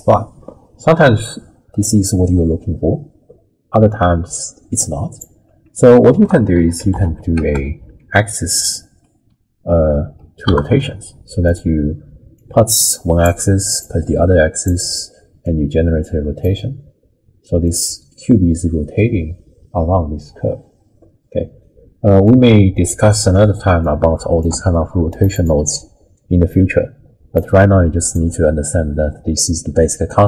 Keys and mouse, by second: 6.1 ctrl+a, 10.1 Down, 12.4-13.2 drag, 13.8-14.7 drag, 15.5-16.5 drag, 17.7-22.3 drag, 22.8 middle click, 23.8-24.4 drag, 24.5 g, 25.3 click, 26.5 click, 27.6 middle click.